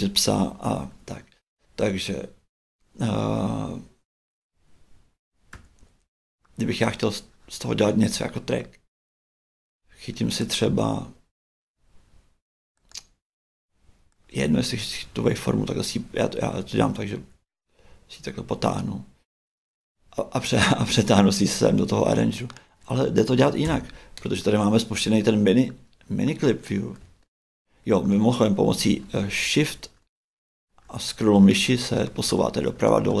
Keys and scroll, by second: 5.5 shift+Right, 6.8 shift+Right, 14.5 shift+Right, 16.1 shift+Right, 18.5 shift+Right, 23.6 shift+BackSpace.